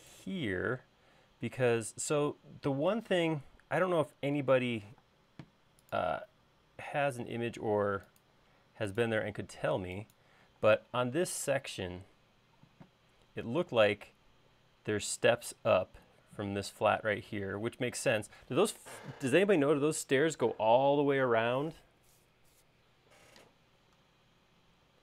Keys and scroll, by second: 2.0-2.5 typing, 5.1 m, 10.7 space.